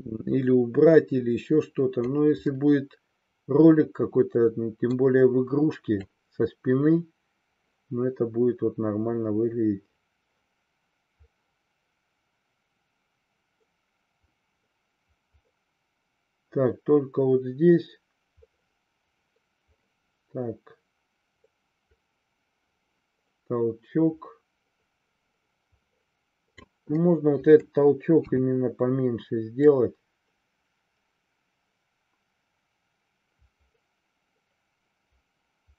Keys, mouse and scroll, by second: 2.5-4.8 middle drag, 6.0-26.6 drag, 27.0-27.6 middle drag, 28.2 KP_3, 29.6-35.7 drag.